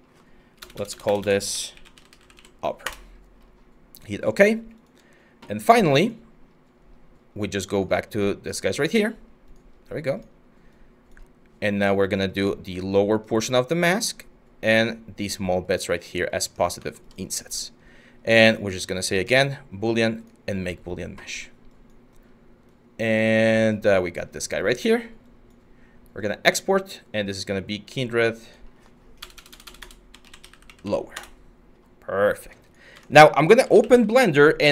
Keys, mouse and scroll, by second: 0.2-2.5 typing, 28.8-31.0 typing, 32.9-34.0 typing, 34.5 Return.